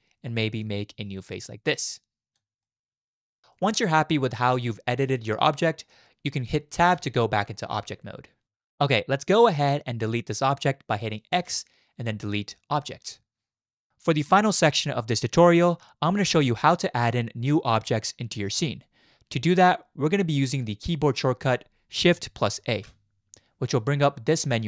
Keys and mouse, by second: 1.4 click, 2.6 middle click, 3.6-5.9 middle drag, 6.9 Tab, 7.8-8.4 middle drag, 11.3 x, 22.7 shift+a.